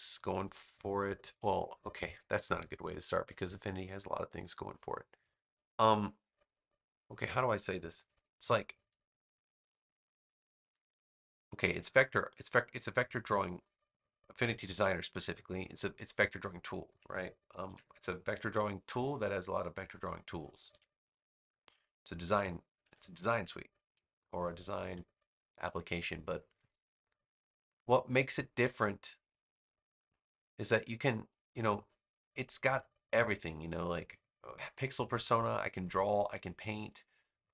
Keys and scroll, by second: 17.5 super+c, 20.6 super+v, 22.7 v.